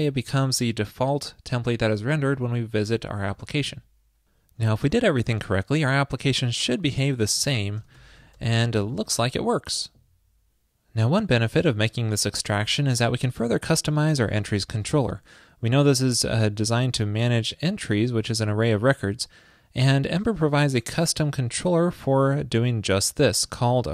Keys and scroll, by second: 3.3 super+s.